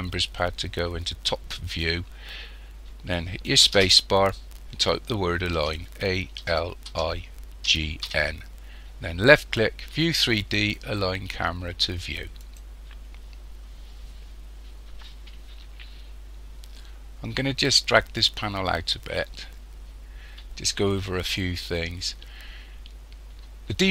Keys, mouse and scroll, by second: 3.7 space, 18.2 click.